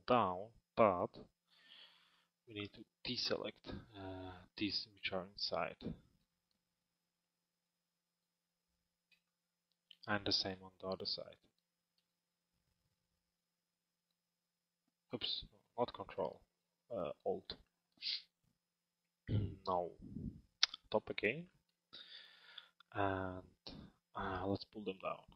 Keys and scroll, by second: 0.9 p, 20.4 t.